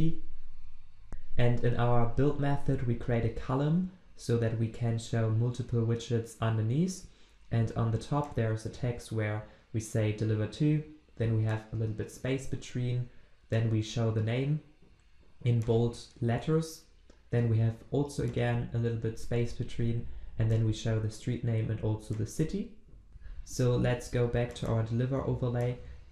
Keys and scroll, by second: 23.1 ctrl+alt+Left.